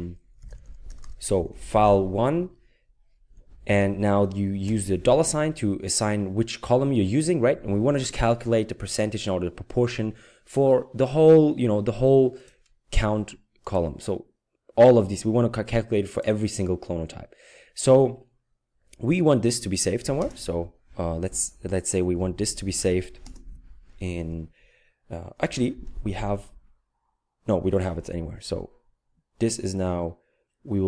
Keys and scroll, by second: 0.2-2.4 typing, 4.7 typing, 21.7-23.5 typing.